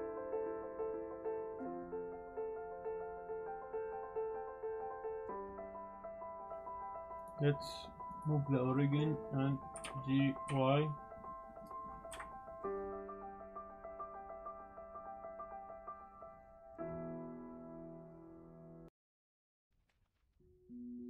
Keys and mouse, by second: 0.0-5.9 typing, 0.1 click, 0.2 ctrl+z, 0.2 click, 0.8 Tab, 0.9 click, 0.9 click, 1.8 click, 1.9 shift+click, 2.0 Tab, 2.0 click, 2.8 click, 2.8 ctrl+z, 2.9 click, 3.0 click, 3.1 ctrl+z, 3.1 click, 3.6 click, 3.8 click, 4.4 Tab, 4.6 Tab, 4.8 ctrl+r, 5.0 Tab, 5.1 click, 5.2 click, 5.3 click, 5.3 click, 5.6 click, 5.6 middle click, 5.8 click, 5.9 middle click, 6.0 middle click, 6.2 middle click, 6.3 middle click, 7.3-8.5 drag, 8.9 middle click, 9.8 g, 9.8 x, 10.4 y, 11.5 click, 12.1 KP_Decimal, 12.7 drag, 12.9 shift+drag, 13.0 click, 13.1-14.5 typing, 13.3 click, 13.4 middle click, 13.6 Tab, 13.8 click, 14.0 click, 14.3 click, 14.7 click, 15.2 ctrl+r, 15.4 click, 15.8-19.6 typing, 16.8 click, 16.9 click, 17.3 Tab, 17.6 alt+click, 17.8 click, 18.3 ctrl+click, 18.5 ctrl+click, 18.6 click, 19.3 click, 19.6 click, 19.8 click, 19.9 Tab, 19.9 drag, 20.2 click, 20.6 drag, 20.9 drag.